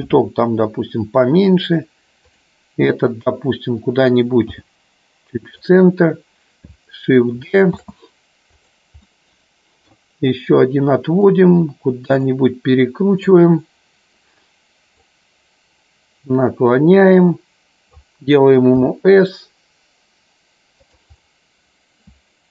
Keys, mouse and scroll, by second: 0.0 s, 2.3 click, 7.7 shift+d, 9.1 middle click, 11.3 click, 13.4-15.1 drag, 16.4-18.1 drag, 21.2-22.5 middle drag.